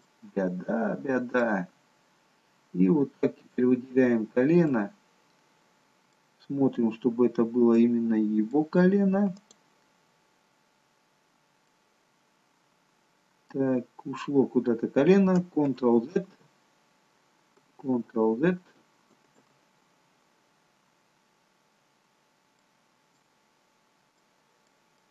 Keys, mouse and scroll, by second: 0.0 middle click, 1.6-2.2 scroll down 1, 2.2 scroll down 1, 3.4 click, 4.5-5.4 scroll down 1, 5.4 middle click, 6.4-7.5 scroll up 2, 7.7 middle click, 9.3 click, 11.0-11.6 scroll down 1, 11.6 middle click, 13.8-14.8 scroll down 3, 17.0 ctrl+z, 19.0 ctrl+z, 22.0-22.6 scroll up 2, 22.6 middle click, 23.4-24.1 scroll down 2, 24.1 middle click, 24.1-25.0 scroll down 1, 25.0 middle click.